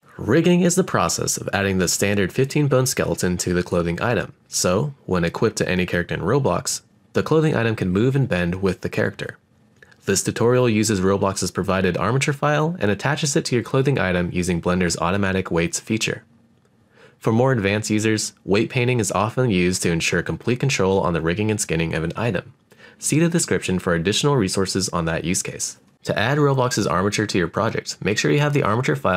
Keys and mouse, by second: 0.0-1.8 middle drag, 2.9 click, 3.5 click, 5.0 r, 7.2 click, 10.3-11.4 middle drag, 15.1 right click, 15.6-16.9 middle drag, 24.6-26.0 middle drag, 27.2 click, 27.9-29.1 middle drag.